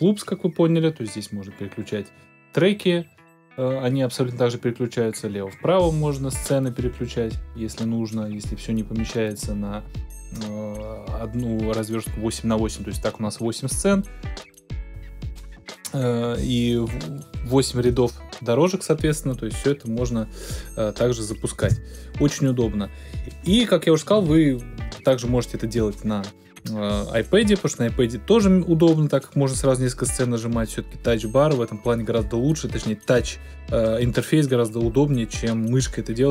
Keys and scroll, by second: 21.6 space.